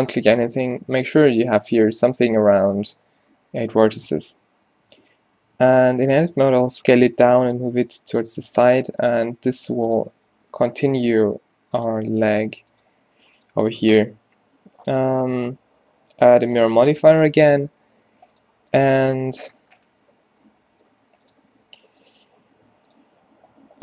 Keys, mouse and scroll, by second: 5.0 Tab, 5.2-9.2 typing, 11.0 g, 12.5 r, 12.9 g, 18.4 click, 20.1 s, 21.3 click, 21.5 r, 22.3 r, 23.1 g.